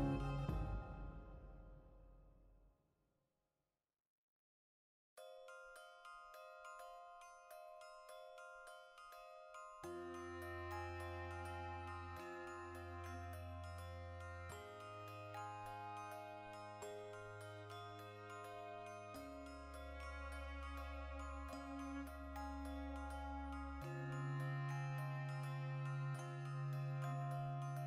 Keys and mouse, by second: 1.3-4.2 shift+middle drag, 4.2 right click, 4.4 ctrl+shift+middle click, 4.9 a, 5.4 right click, 6.0-13.9 ctrl+shift+middle drag, 7.0 w, 8.5 F9, 12.0 Tab, 13.9 shift+right click, 14.8 shift+middle click, 15.3 shift+right click, 15.8-17.2 shift+middle drag, 17.2 shift+right click, 17.5 ctrl+l, 18.7-20.7 shift+middle drag, 20.3 ctrl+z, 20.7 shift+right click, 21.1 ctrl+l, 22.7 middle click, 22.9 right click, 23.1-25.4 shift+middle drag, 25.4 right click, 25.6 ctrl+middle click, 26.3 right click, 26.5-27.6 ctrl+shift+middle drag, 27.6-27.8 shift+right drag.